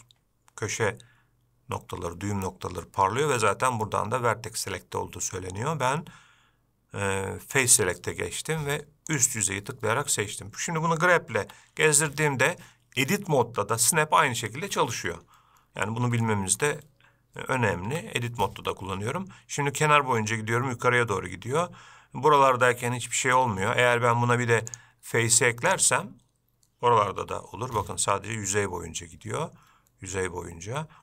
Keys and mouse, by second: 7.7 click, 9.3 click, 11.6 g, 16.4 shift+middle click, 18.1 g, 24.9-26.5 drag, 27.4 g.